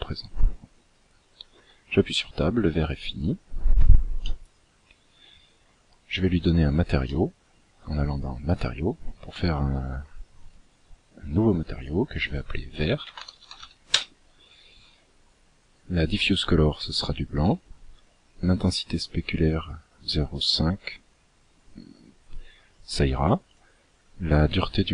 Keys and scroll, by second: 0.7 Tab.